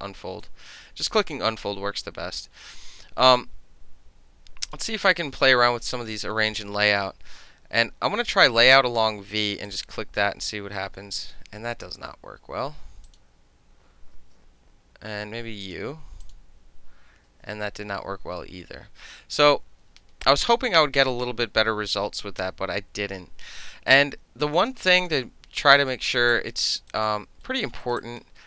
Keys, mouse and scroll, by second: 0.4 alt+right click, 0.7-4.7 alt+middle drag, 4.7 click, 4.8-5.3 middle drag, 5.3 scroll down 1, 9.7 click, 12.0 ctrl+z, 13.1 click, 14.2 ctrl+z, 15.7 click, 16.3 click, 17.3 ctrl+z, 18.2 middle click, 23.9-24.5 right drag, 24.6 click, 25.0 click, 25.8 alt+right click, 26.1 alt+middle click, 26.3-26.6 alt+drag, 26.9 alt+right click, 27.5 alt+middle click, 27.8 alt+right click, 28.0 alt+click.